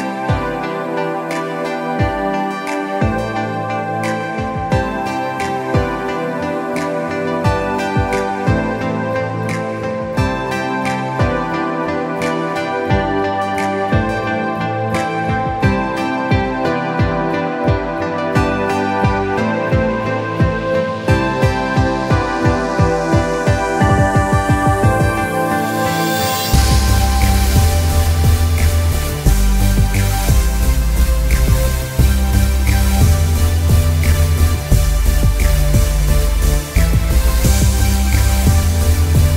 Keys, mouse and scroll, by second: 4.4-5.2 alt+scroll down 2, 5.3 click, 5.8 shift+click, 6.2-6.6 scroll down 1, 6.6 click, 6.8-7.3 alt+scroll down 2, 7.5 ctrl+s, 9.9-10.4 alt+scroll up 2, 10.4 click, 13.1 alt+scroll down 1, 13.4 z, 13.7 click, 13.8 alt+scroll down 1, 14.2 click, 14.5 alt+scroll down 1, 14.7 scroll up 1, 14.8 space, 15.4-16.0 alt+scroll up 4, 16.0 scroll, 16.3 click, 16.4 scroll up 1, 16.8 click, 17.0 alt+scroll up 1, 17.3 click, 18.0 click, 18.1 alt+scroll up 2, 18.3 click, 18.5-18.9 alt+scroll down 2, 19.1 click, 20.9 ctrl+shift+], 21.2 click, 22.5 click, 23.2 click, 24.1 click, 24.5 ctrl+z, 25.5 click, 28.4 click, 30.1-31.2 alt+scroll down 5, 30.9 click, 31.6 click, 32.0 alt+scroll up 1, 32.3 alt+scroll down 1, 32.5 click, 32.7 space, 33.2-33.8 scroll up 1, 33.8 click, 34.6 click, 37.0-37.6 scroll down 1, 37.6 click, 37.7 scroll up 1, 38.1 click, 38.4 alt+scroll up 1, 39.2 click.